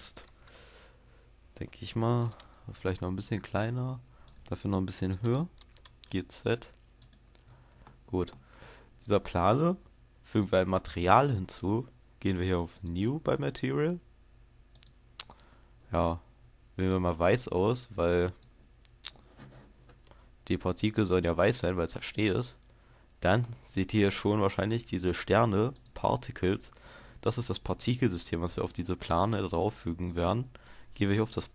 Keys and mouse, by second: 0.0 click, 0.5 KP_0, 2.8 s, 5.6 g, 7.1-31.5 drag.